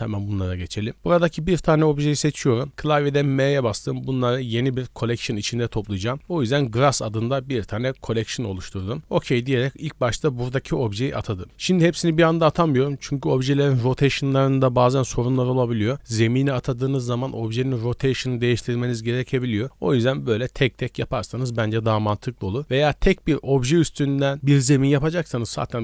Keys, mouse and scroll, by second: 0.9 right click, 3.1 m, 6.6 s.